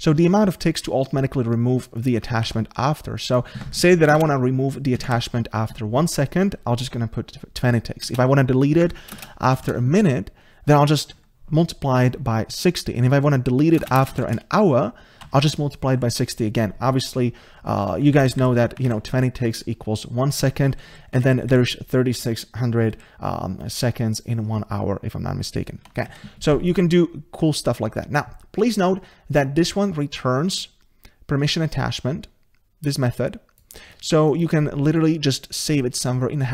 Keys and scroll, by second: 18.9 ctrl+shift+Right.